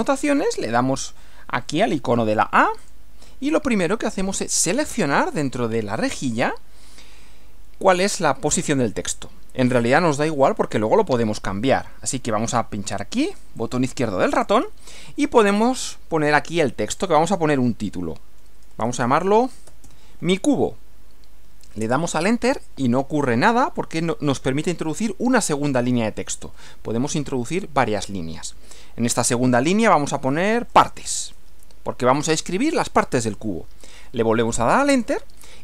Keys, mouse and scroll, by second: 2.9 click, 13.7 click, 15.6 click, 16.9 click, 18.6-20.3 typing, 21.8 Return, 30.3-32.0 typing, 34.9 Return.